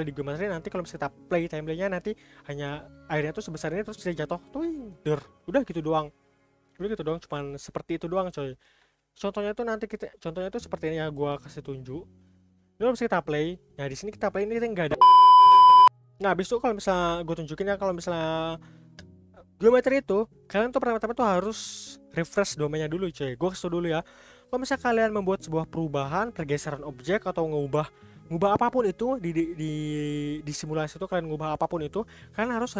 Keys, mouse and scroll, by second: 3.4-5.5 scroll down 1, 8.0-8.9 scroll up 2, 8.9 scroll down 1, 9.5-13.2 shift+middle drag, 13.2 click.